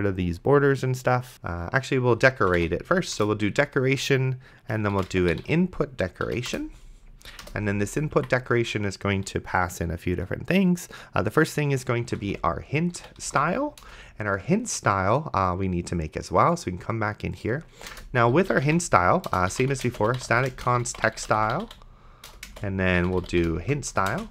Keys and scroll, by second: 2.6 e, 3.2 Return, 4.9-6.2 typing, 6.3 Down, 6.5 Return, 7.5 Return, 8.2 Escape, 11.8-14.1 typing, 18.2-24.3 typing, 22.3 Return, 23.9 Return.